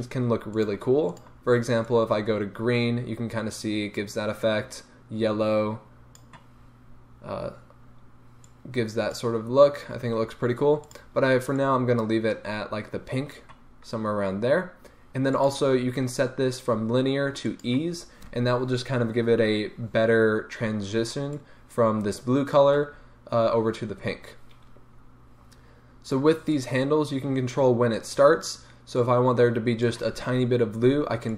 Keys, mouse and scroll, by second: 0.5 drag, 1.1 click, 8.4 click, 15.3-31.3 drag.